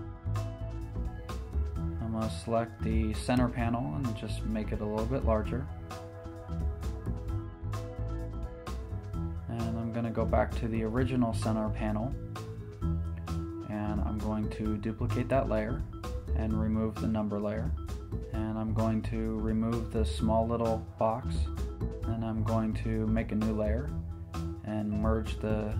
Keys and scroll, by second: 2.5 super+t, 6.8 Return, 23.8 shift+super+n.